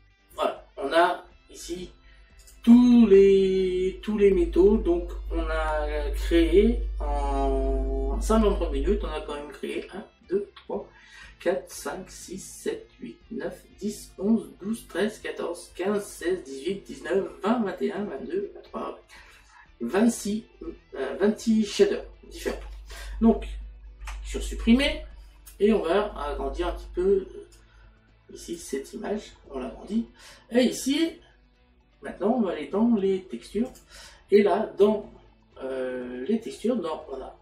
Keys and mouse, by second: 22.5 click, 27.6 click, 33.7 click.